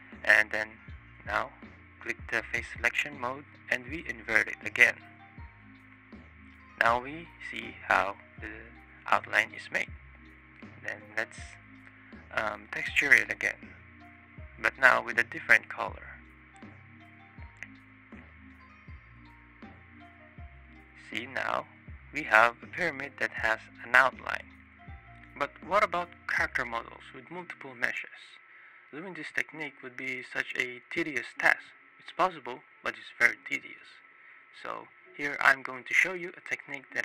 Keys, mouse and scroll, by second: 1.5 click, 2.2-3.1 ctrl+drag, 4.7 click, 5.4 click, 5.8-6.8 drag, 9.3-9.9 ctrl+drag, 11.1 click, 11.7 ctrl+click, 13.0 click, 14.0 click, 15.3 click, 17.7 click, 18.2 click, 20.2 click, 20.9 click, 21.4 middle click, 22.3 click, 22.6 shift+middle click, 23.9 click, 25.6 click, 26.4 click, 26.6 shift+click, 28.0 shift+click, 30.4 right click, 33.9 click, 34.2 click, 34.4 drag, 36.7 click.